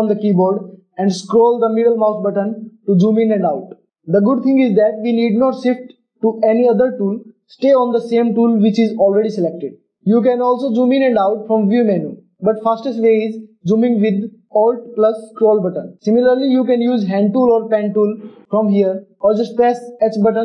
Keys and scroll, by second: 20.2 h.